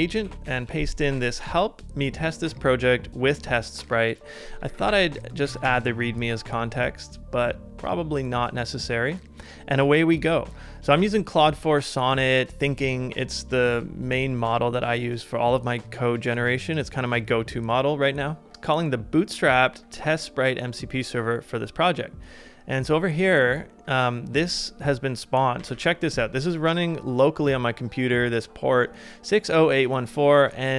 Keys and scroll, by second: 0.4 super+v, 4.3-5.5 typing, 5.5 Down, 5.6 Return, 25.6 super+=, 25.7 super+=.